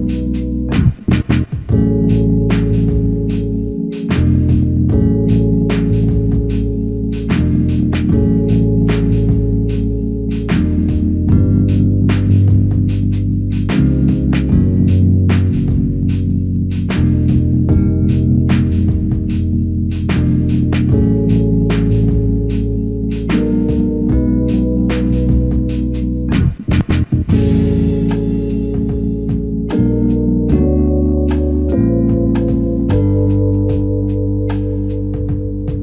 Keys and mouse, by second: 14.1 alt+click, 21.3 shift+click, 31.5 double click.